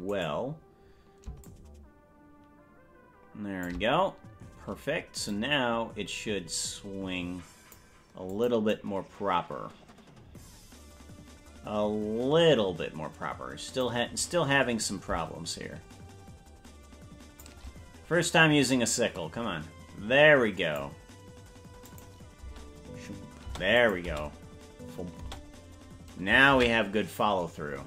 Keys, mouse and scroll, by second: 0.4 right click, 1.5-3.8 shift+drag, 5.5-8.0 drag, 8.5 click, 8.9-14.1 drag, 15.6-17.6 shift+drag, 18.9-21.0 drag, 22.1 click, 22.6 space, 23.8 space, 24.0 click, 24.2 space, 25.4 space.